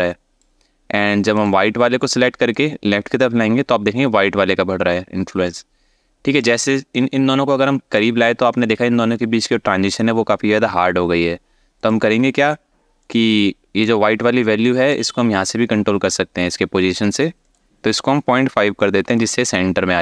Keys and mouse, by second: 2.2-6.1 drag, 6.6 click, 11.6-12.7 drag, 13.5 click, 17.1-18.8 drag.